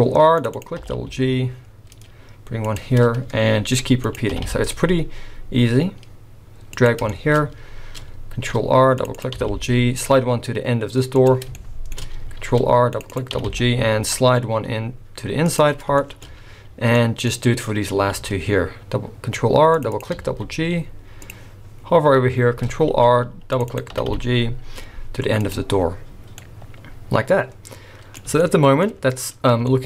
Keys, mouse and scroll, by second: 0.8 g, 3.6 ctrl+r, 7.1 shift+middle click, 7.3 scroll up 2, 8.4 ctrl+r, 9.3 g, 11.5 shift+middle click, 12.4 ctrl+r, 13.3 g, 15.8 scroll down 4, 16.0 shift+middle click, 16.5-18.0 scroll up 3, 16.9 middle click, 18.1 ctrl+r, 20.1 g, 22.9 ctrl+r, 23.9 g, 25.7-26.4 scroll down 5, 26.4 middle click, 28.4 shift+middle click, 29.7 shift+middle click.